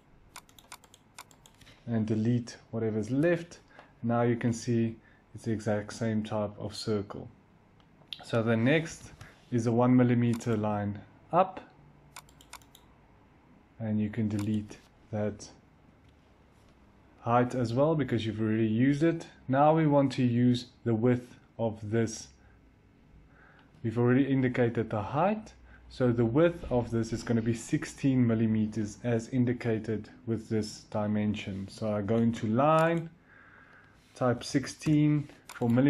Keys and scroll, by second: 1.9-2.7 typing, 11.8 l, 15.8 Delete, 32.0 i, 34.0-34.9 typing.